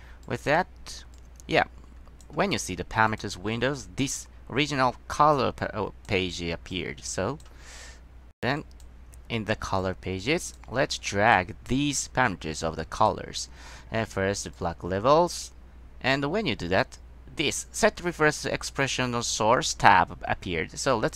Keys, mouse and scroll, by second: 0.4 drag, 1.3-2.4 drag, 3.2 click, 5.5-6.2 drag, 6.8-7.6 drag, 8.4 middle click, 8.7 click, 9.9 click, 11.4 click, 13.1 click, 14.7-16.3 drag.